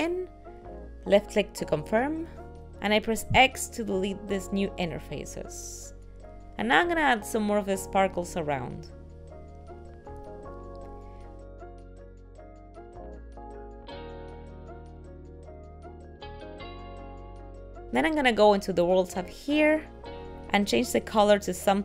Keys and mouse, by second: 3.0 x, 9.0 click, 9.1 right click, 9.4 click, 9.9 g, 11.8 click, 12.1 g, 13.4 r, 13.4 s, 14.2 g, 14.4 shift+d, 15.5 click, 15.9 g, 16.4 shift+d, 16.9 s, 17.2 g, 20.2 click, 21.6 click.